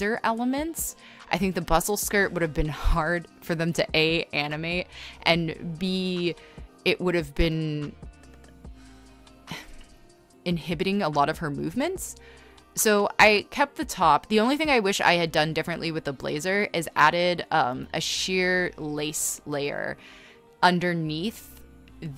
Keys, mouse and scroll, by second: 0.3 e, 3.3 space, 3.7 space, 3.9 ctrl+z, 6.1 ctrl+z, 6.2-8.2 typing, 9.2 ctrl+z, 9.8 ctrl+z, 9.8-11.5 typing, 12.9 space, 15.2-17.7 typing, 19.1-21.0 typing, 21.5 scroll.